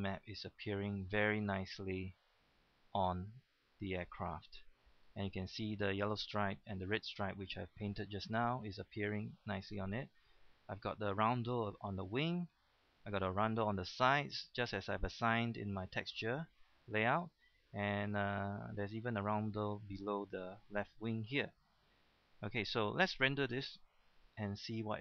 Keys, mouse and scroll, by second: 10.8 scroll up 1, 11.1-22.7 middle drag, 24.0 KP_0, 24.1 KP_0.